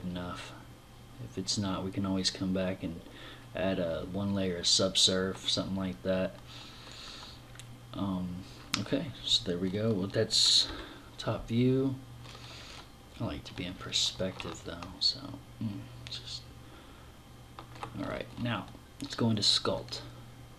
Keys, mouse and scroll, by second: 10.4 KP_7, 11.4-14.4 scroll down 9, 14.4 middle click, 20.1 click.